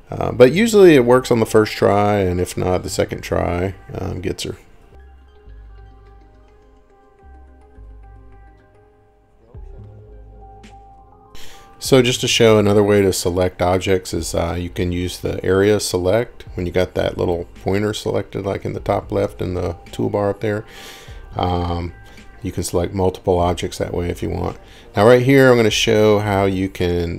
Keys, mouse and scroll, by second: 2.4 click, 5.0 scroll, 7.4 scroll down 5, 7.8 middle click, 8.1 scroll down 4, 9.6 scroll, 10.3-11.0 scroll, 10.5 Escape, 11.4 click, 12.9 click, 18.1 click, 19.1 Escape, 19.3 Escape, 22.1 click, 23.8 click, 27.0 m.